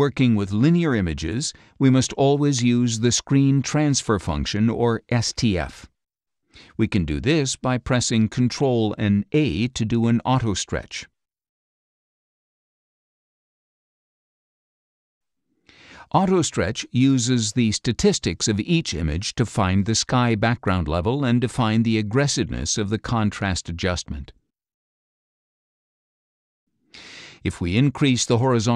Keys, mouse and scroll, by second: 0.1 scroll up 2, 0.3-7.4 shift+drag, 8.4 ctrl+a, 9.7 ctrl+click, 10.3 ctrl+a, 13.3 click, 14.9 click, 16.9 ctrl+click, 19.6-20.9 drag, 21.9 click, 25.7 click, 26.9 scroll down 2, 27.7-28.3 scroll down 4.